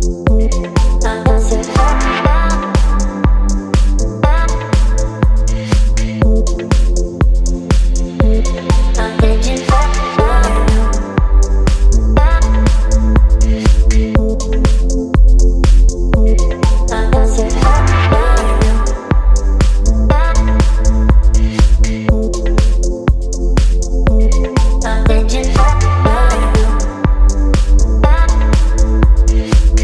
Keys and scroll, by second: 0.4 space, 2.0 t, 5.4 h, 8.6 ctrl+a, 18.2 v, 24.7 c.